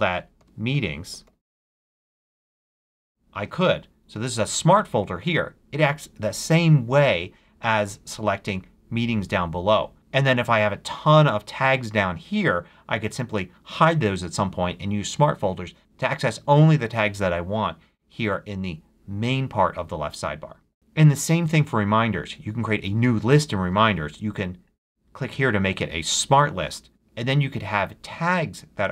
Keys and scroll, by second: 0.0 super+a, 0.4 shift+super+m, 0.5-2.2 typing.